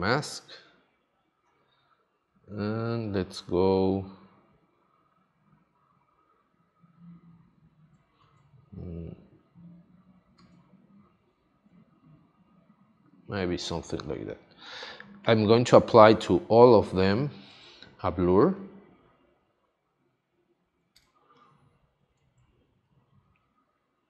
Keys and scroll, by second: 8.2 super+z, 10.3 super+z, 16.0 space, 21.0 space.